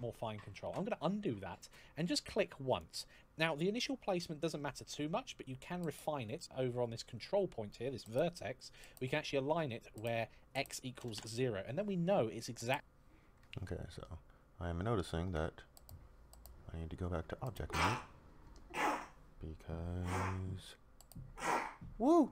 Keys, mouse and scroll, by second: 0.4 ctrl+z, 2.4 click, 10.2 click, 10.7 KP_0, 10.9 Return.